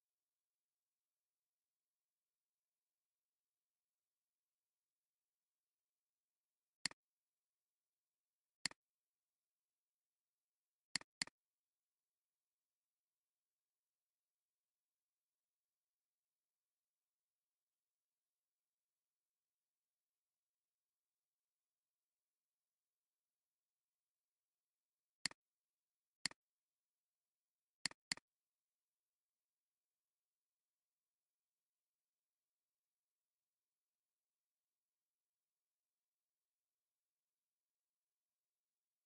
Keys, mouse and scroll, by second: 0.0-5.2 typing, 8.8 alt+click, 11.0 double click, 13.7 ctrl+a, 14.9-16.1 typing, 17.2-24.0 typing, 25.7 typing, 26.1 alt+click, 28.9 ctrl+a, 30.0-34.7 typing, 36.2 Return, 36.8-39.0 typing.